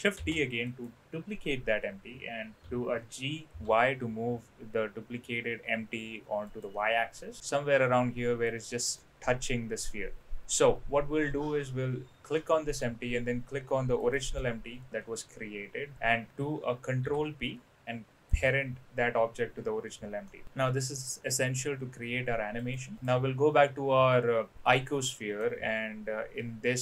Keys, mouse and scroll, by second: 0.2 shift+d, 2.6 g, 8.9-10.2 middle drag, 14.0 shift+click, 16.9 ctrl+p, 20.2-21.5 middle drag, 22.6 click, 22.9 click, 25.0-25.3 middle drag.